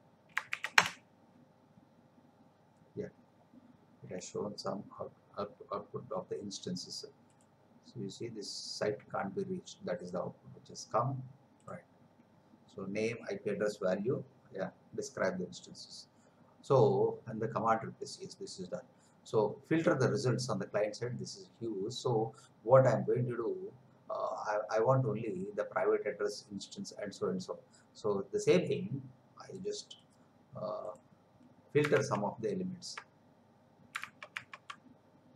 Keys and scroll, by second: 0.5 shift+', 0.8 Return, 32.1 alt+Tab, 34.2 alt+Tab.